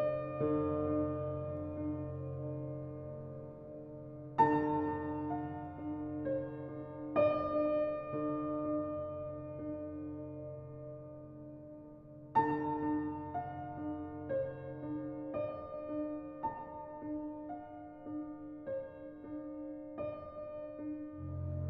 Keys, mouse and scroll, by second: 4.3 click, 6.7-8.8 drag, 9.9 drag, 10.7 scroll up 1, 16.7-18.1 drag, 18.8-20.0 drag, 20.9-21.6 drag.